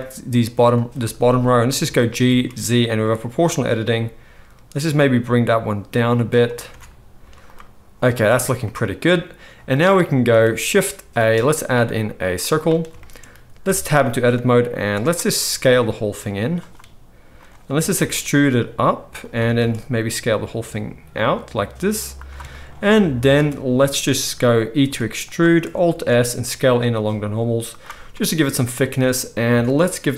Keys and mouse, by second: 0.6-11.1 middle drag, 1.8 g, 6.8 Tab, 7.1 z, 8.2 alt+a, 11.1 shift+a, 11.2-15.1 middle drag, 13.6 Tab, 14.1 d, 15.1-25.3 drag, 15.6 s, 17.3 middle click, 17.3 right click, 17.7 e, 19.3 a, 19.5 s, 23.3 alt+a, 24.8 e, 25.3 middle click, 25.9 alt+s, 26.1-30.1 middle drag, 29.5 Tab.